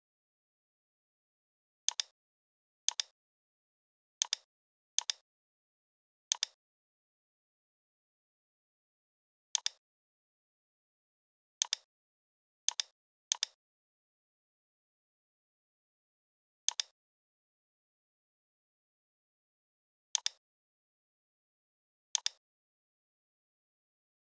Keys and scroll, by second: 14.5 l, 19.5 v.